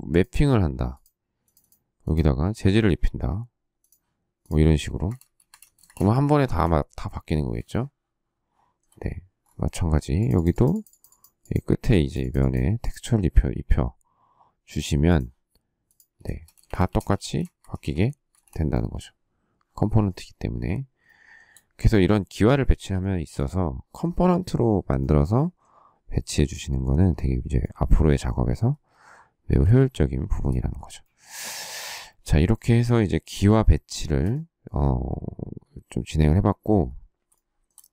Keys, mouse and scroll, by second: 4.8 space, 5.0 Escape, 5.7 space, 6.0 Escape, 6.4 space, 7.6 shift+middle click, 16.1 space, 16.2 Escape, 16.8 Escape, 16.9 space, 17.2 space, 17.5 Escape, 17.8 Escape, 18.2 space, 21.0 shift+middle click, 22.9 shift+middle click, 29.7 shift+middle click, 33.5 shift+middle click, 37.2 shift+middle click.